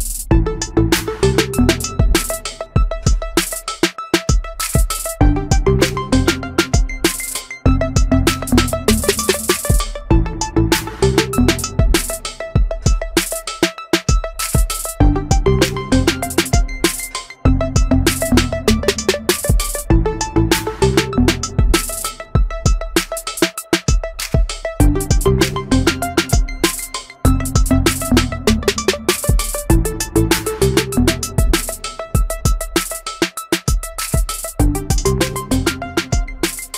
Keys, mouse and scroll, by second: 1.4 Delete, 3.9 shift+middle click, 10.2 shift+middle click, 23.9 alt+t, 25.0 shift+middle click, 28.2 e.